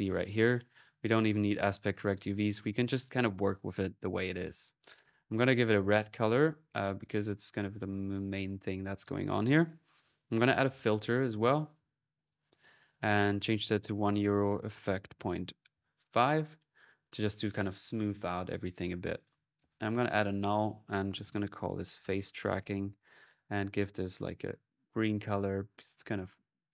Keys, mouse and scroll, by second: 4.8 c, 5.8 click, 6.4 middle click, 6.4 typing, 6.8 click, 7.4 middle click, 7.7-8.9 drag, 9.7 right click, 10.2-10.9 typing, 11.5 click, 12.1 click, 12.9-14.0 drag, 14.2 click, 18.4 click, 19.0 click, 19.1-19.9 typing, 19.9-21.2 alt+drag, 24.2 c, 26.5 click.